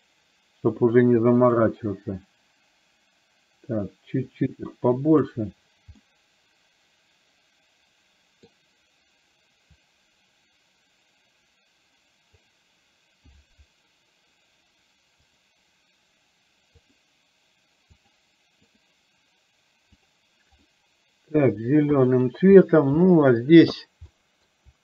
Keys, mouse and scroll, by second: 1.6-5.3 drag, 6.1-8.6 middle drag, 9.9-12.5 drag, 20.1 drag, 20.8-21.5 middle drag, 22.1 middle drag, 23.1 middle drag, 24.3 shift+middle drag.